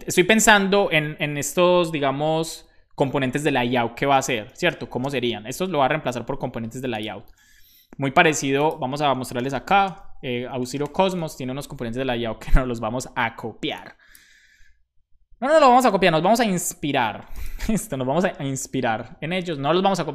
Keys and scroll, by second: 0.0-0.3 typing, 3.9 Return, 4.6 shift+;, 4.6 space, 5.0 space, 5.0 '.